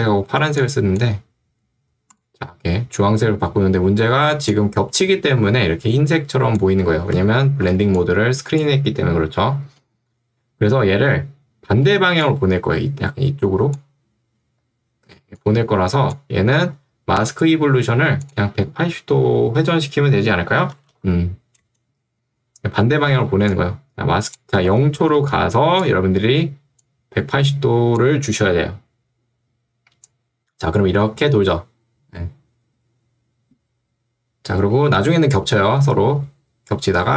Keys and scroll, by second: 4.2 ctrl+2, 7.2 Escape, 7.9 ctrl+2, 9.7 Escape, 11.9 2, 14.5 Escape, 20.9 0, 21.8 Return, 23.3 ctrl+2, 24.7 Escape, 25.1 ctrl+2.